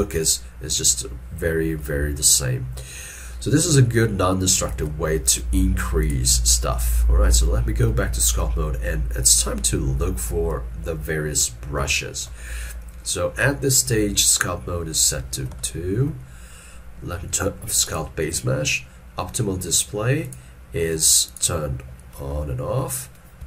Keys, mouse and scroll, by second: 0.1 ctrl+Tab, 4.8 ctrl+Tab, 7.3 ctrl+middle click, 8.2 shift+middle click, 12.0 shift+middle click, 15.6 ctrl+middle click, 22.3 ctrl+middle click.